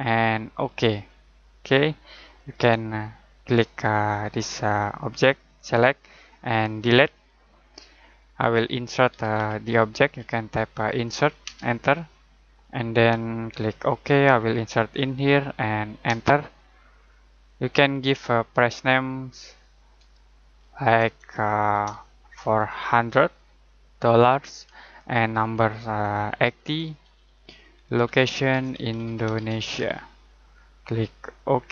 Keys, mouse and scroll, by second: 6.8 Delete, 9.1-11.4 typing, 13.7 click, 16.0 space, 17.4 click, 19.8 click, 21.7-23.3 typing, 24.2 Tab, 26.2-27.1 typing, 27.8 Tab, 28.2-30.2 typing, 31.5 click.